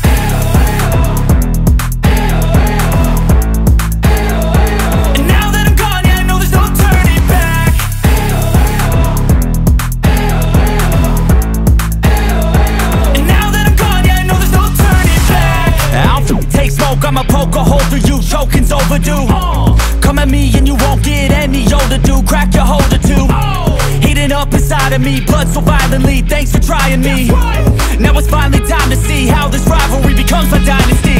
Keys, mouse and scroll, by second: 1.5-1.9 alt+scroll up 1, 2.5-2.9 alt+scroll up 1, 3.0 alt+scroll down 1, 4.3 click, 6.9 alt+scroll up 1, 9.2 click, 11.6 right click, 12.9 click, 13.0 click, 14.1 alt+scroll up 1, 14.4 space, 14.8-15.1 click, 15.7-18.9 drag, 20.3 ctrl+d, 20.8-21.1 alt+scroll down 1, 21.5 alt+scroll up 1, 21.6-23.1 drag, 23.1 ctrl+d, 23.7 space, 23.8-24.5 click, 24.2 space, 25.1-28.2 drag, 30.3 ctrl+d.